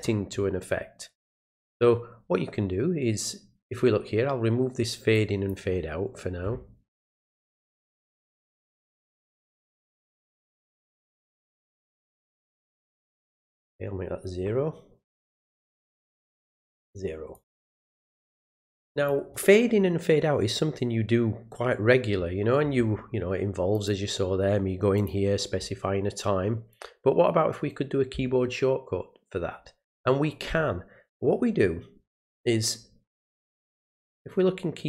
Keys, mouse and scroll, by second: 5.1 click, 7.9 click, 9.6 click, 12.0 click, 13.2 click, 16.9 click, 17.3 click, 18.9 click, 23.7 click, 25.0 click, 33.3 click.